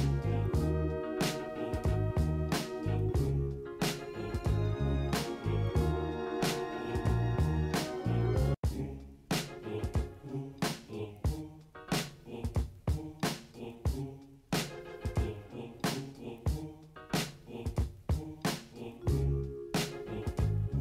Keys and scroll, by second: 19.1 typing, 19.3 ctrl+-.